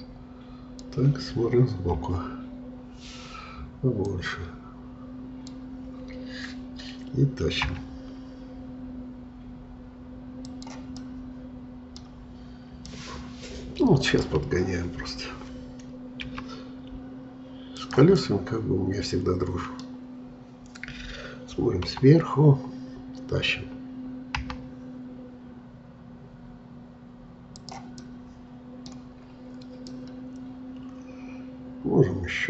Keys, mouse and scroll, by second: 2.0 KP_3, 4.1-7.7 drag, 7.7 g, 11.0-14.5 middle drag, 14.5-15.0 scroll up 2, 15.0-16.3 scroll down 1, 16.3 s, 18.2-21.3 middle drag, 21.8 KP_7, 24.4 g, 28.0-29.2 middle drag, 29.2-29.9 scroll up 4, 29.9-32.4 middle drag.